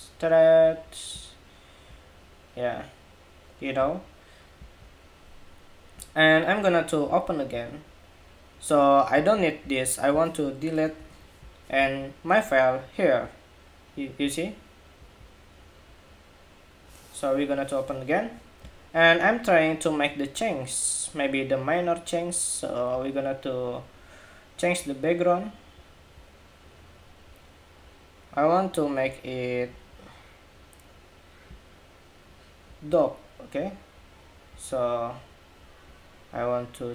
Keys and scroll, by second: 10.6 super+BackSpace.